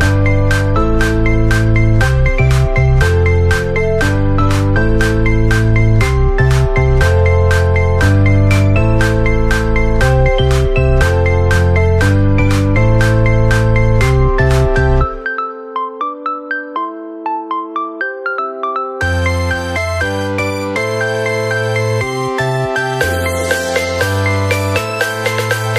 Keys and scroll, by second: 15.6 ctrl+-, 20.2 ctrl+-, 22.7 ctrl+c, 22.8 ctrl+v, 25.0 ctrl+v.